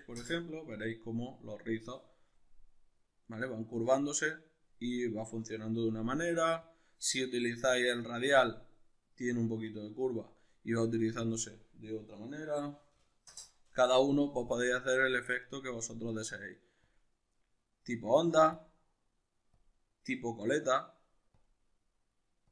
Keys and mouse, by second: 0.2 Return, 6.6-22.5 drag, 13.4 Return.